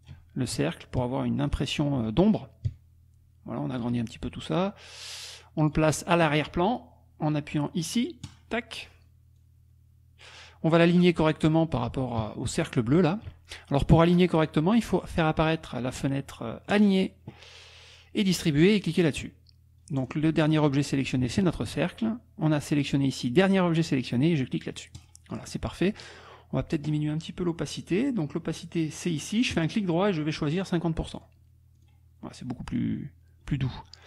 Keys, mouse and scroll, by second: 0.5-1.7 shift+drag, 2.7-3.9 shift+drag, 4.9 click, 8.4 click, 9.4-10.5 drag, 12.6 shift+click, 16.7 click, 20.0 click, 20.5 click, 21.4 shift+click, 22.5-24.0 drag, 24.9 click, 26.2 click, 29.6 right click, 31.1 click, 31.8 click, 32.9 KP_Subtract, 33.5 middle click.